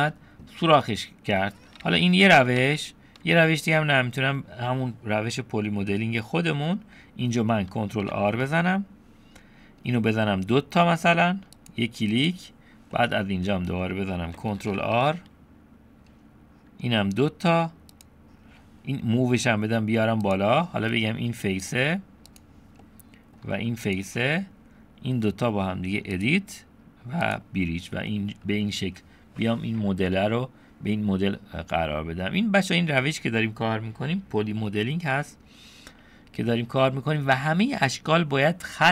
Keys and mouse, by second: 0.8 middle click, 1.9 ctrl+z, 3.5 middle click, 6.6 middle click, 8.0 ctrl+r, 13.0 middle click, 15.0 ctrl+r, 21.7 click, 22.3 click, 22.9 middle click, 23.9 shift+click, 24.4 middle click, 26.2-27.4 right drag, 28.1 middle click, 31.8 middle click.